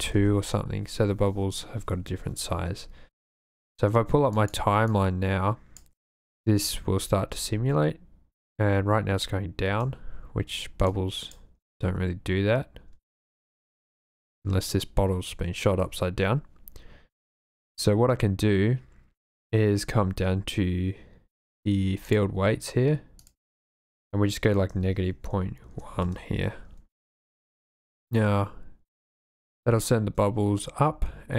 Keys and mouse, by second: 4.4 click, 5.1 click, 6.4 drag, 7.3 space, 9.7 space, 10.9-11.4 drag, 13.0 space, 22.1 click, 23.3-26.1 drag, 27.4 click, 28.0 space.